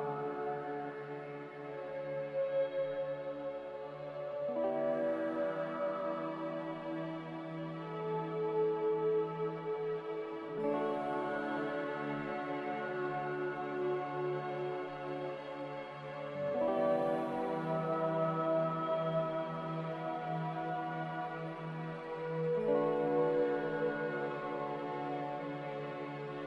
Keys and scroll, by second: 0.0 a, 3.7 n, 6.3 Escape, 9.8 ctrl+z, 10.3 ctrl+z, 10.4-11.1 typing, 13.7 Delete, 13.7 z, 15.3 typing, 15.8 Return, 17.8 typing, 19.0-20.1 typing.